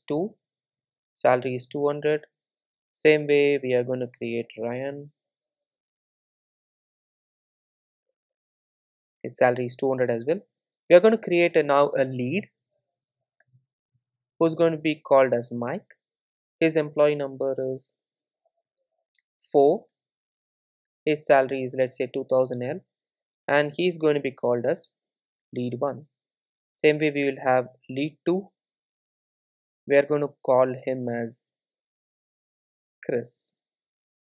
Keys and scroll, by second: 2.5 super+s, 3.7 super+d, 10.6 super+d, 13.4 super+d, 14.6 Return.